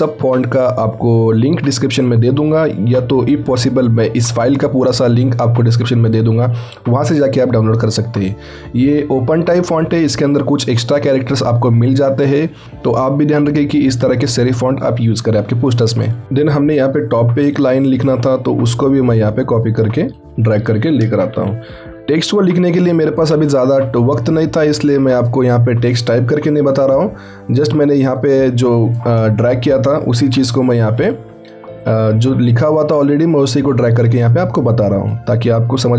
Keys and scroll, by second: 21.4 ctrl+t, 22.2 ctrl+alt+t, 29.5 ctrl+a, 30.2 ctrl+t, 30.8 ctrl+t.